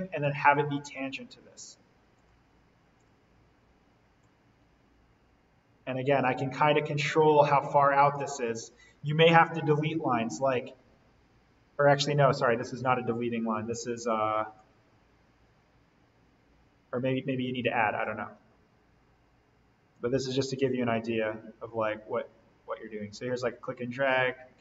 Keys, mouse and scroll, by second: 8.3-10.3 scroll down 1, 10.3-12.4 scroll up 1, 14.5 click, 17.9 scroll up 1, 19.0-19.9 scroll down 1, 19.9-24.6 drag.